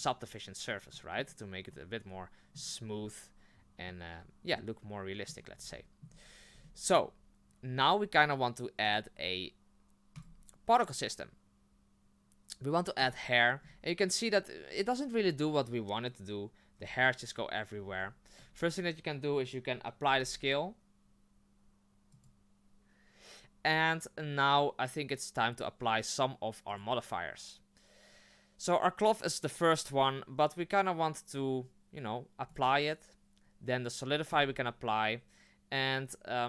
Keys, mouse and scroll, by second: 0.0-0.9 drag, 0.9-5.3 middle drag, 5.3-5.7 scroll down 2, 5.7-10.2 shift+middle drag, 10.2-13.1 drag, 13.6-16.7 scroll down 5, 16.7-17.6 scroll down 3, 17.7-20.0 scroll up 6, 22.3 ctrl+a, 32.6-34.5 drag, 35.4-35.9 middle drag.